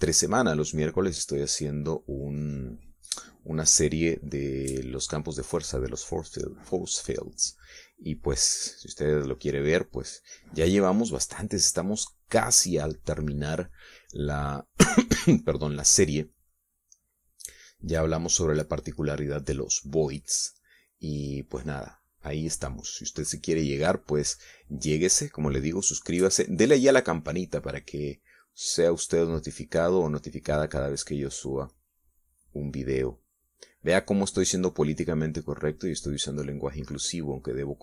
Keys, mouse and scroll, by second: 2.4 click, 6.2-7.3 drag, 7.8-9.8 drag, 11.5 middle click, 12.2-16.4 drag, 16.5 click, 16.9 click, 18.0 click, 18.6 middle click, 19.6-24.1 drag, 25.5 middle click, 26.2-33.3 drag, 34.8-37.8 drag.